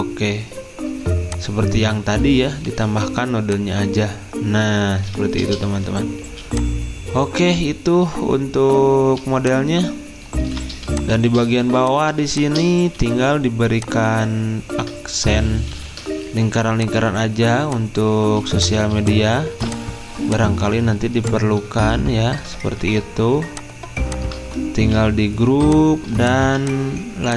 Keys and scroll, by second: 5.5 Escape, 6.3 z, 15.5-16.2 typing, 19.0-20.0 typing, 22.8 ctrl+d, 24.9 ctrl+g, 26.4 z.